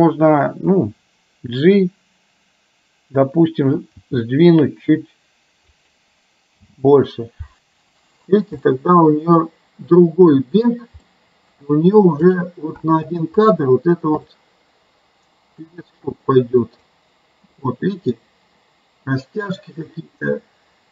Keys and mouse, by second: 3.9 g, 6.8 space, 8.7 middle click, 11.2 middle click, 12.4 click, 12.8 space, 13.6 click, 14.3-15.8 middle drag, 16.7 click, 17.7-20.9 middle drag.